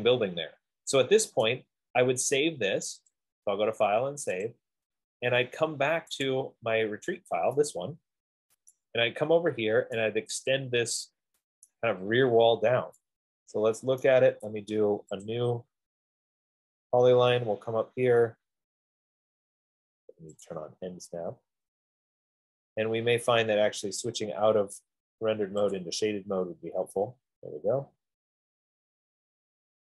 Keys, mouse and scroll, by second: 1.7 right click, 3.4 click, 4.8 click, 6.7 click, 9.0 right click, 10.0 middle click, 10.2 middle click, 11.9 right click, 14.3 right click, 15.5 click, 16.3 middle click, 16.6 middle click, 16.7 middle click, 17.1 middle click, 17.3 middle click, 20.7 click, 24.5 click, 25.9 click.